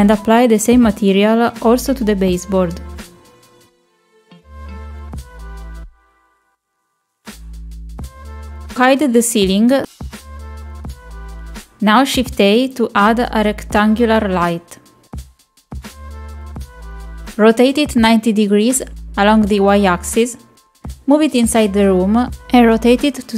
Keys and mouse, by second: 0.0 click, 3.2 click, 5.3 click, 11.2 click, 12.4 middle click, 12.8 middle click, 13.3 middle click, 14.5 shift+a, 18.8 shift+middle click, 19.7 r.